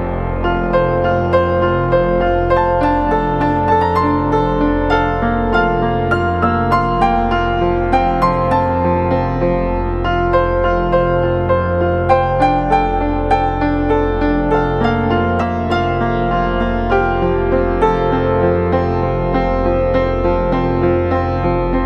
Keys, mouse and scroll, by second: 11.6 double click, 18.0 double click.